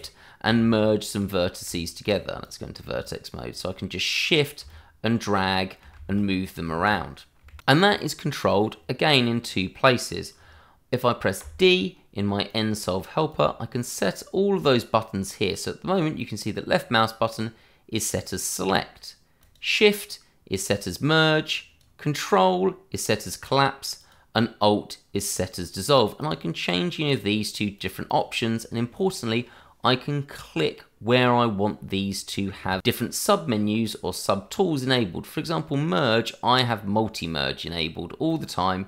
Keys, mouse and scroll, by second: 0.5 ctrl+z, 1.1 click, 1.6 Tab, 2.4 click, 3.0 shift+click, 4.6 shift+click, 4.7 click, 4.8 shift+click, 6.7 ctrl+z, 7.6 click, 11.4 d, 12.5 click, 15.3 click, 19.4 click, 21.5 click, 26.2 click, 28.1 double click, 38.2 click.